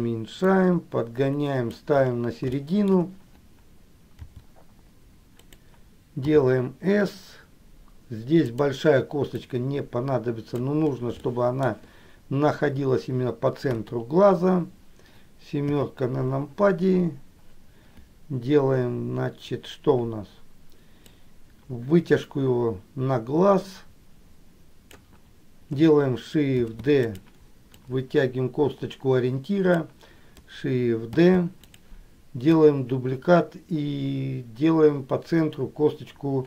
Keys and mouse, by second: 0.6-2.0 drag, 2.7 shift+middle click, 4.4 r, 9.6-10.8 drag, 11.4 shift+middle click, 13.8 KP_1, 21.3-25.2 drag, 26.7 shift+d, 28.0-30.0 drag, 31.2 shift+d, 32.7-36.4 drag.